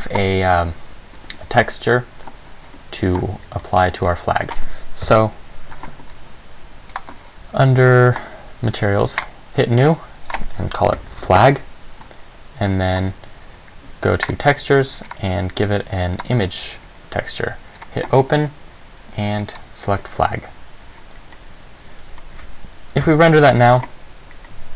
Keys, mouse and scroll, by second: 3.8 middle click, 4.7 right click, 5.2 KP_1, 7.1 click, 9.4 click, 9.9 click, 10.4 click, 13.1 click, 14.4 click, 15.2 click, 19.8 click, 21.5 middle click.